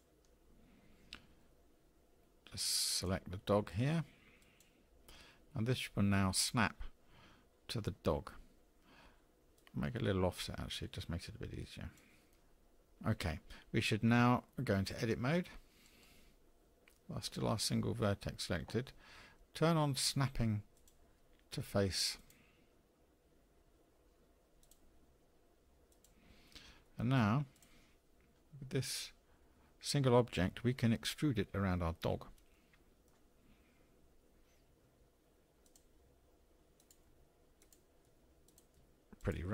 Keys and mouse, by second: 9.6-12.0 drag, 15.8 Tab, 20.9-24.5 drag, 25.9 click, 26.9 middle click, 27.5-28.3 drag, 32.6-33.1 shift+middle drag, 34.8 e, 36.1 e, 37.1 e, 38.1 e, 38.7 e.